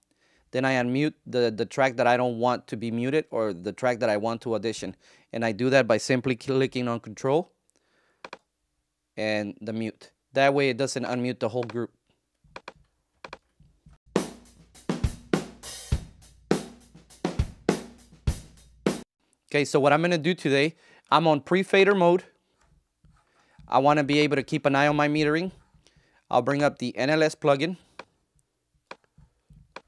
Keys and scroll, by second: 13.9 ctrl+space, 18.9 space.